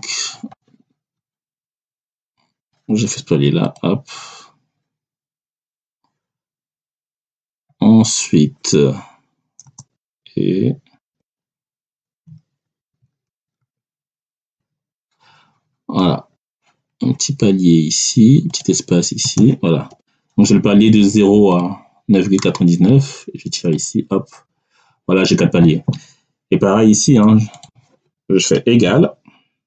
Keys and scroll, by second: 1.6 BackSpace, 9.5 space, 9.9 1, 10.9 3, 12.7 ctrl+alt+[, 13.5 3, 14.3 Return, 19.1 space, 19.8 Return, 28.8-29.6 typing.